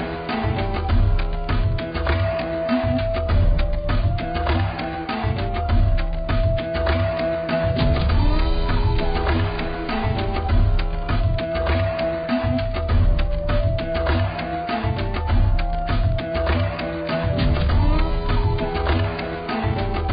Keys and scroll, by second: 7.8 b.